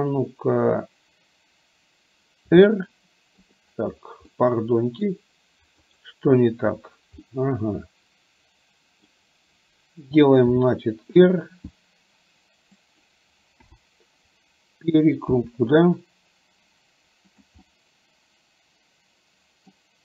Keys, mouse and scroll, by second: 2.5 r, 4.4-5.3 middle drag, 6.1 click, 7.4-9.3 middle drag, 10.6 r, 13.8 KP_7, 15.5 r, 17.8-19.9 middle drag.